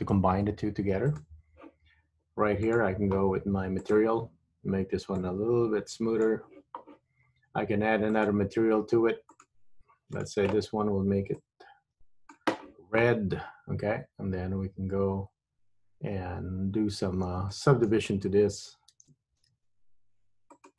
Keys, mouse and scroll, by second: 1.2 click, 2.9 click, 4.0 click, 5.3 click, 8.2 click, 9.4 click, 10.3 click, 14.9 Tab, 16.7-17.4 scroll up 1, 17.4-18.7 scroll down 1, 18.7 shift+middle click, 19.7 ctrl+r.